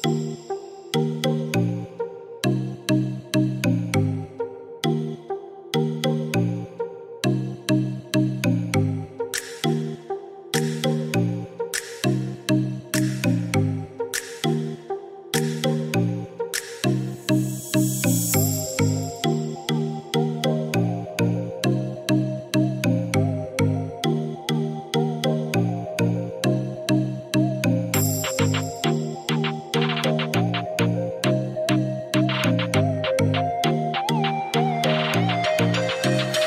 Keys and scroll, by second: 0.1 Return, 7.0-8.5 typing, 8.9 Return, 21.9 Escape.